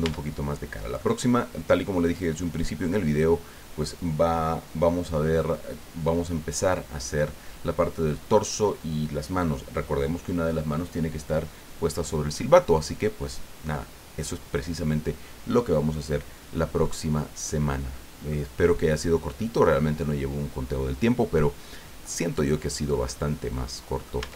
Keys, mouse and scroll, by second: 0.0 Tab, 0.5 scroll down 1, 1.0-3.3 drag, 16.3-16.7 scroll down 1, 16.8-18.4 drag, 18.5-18.9 scroll up 1, 19.4-23.1 drag, 23.5 click, 24.2 middle click, 24.2 Tab.